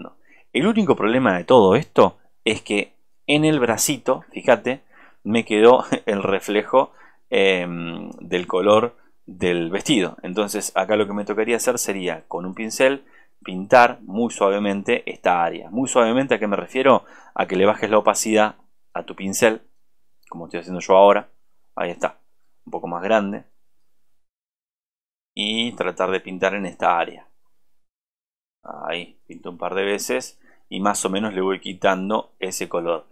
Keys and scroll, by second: 32.6 ctrl+space.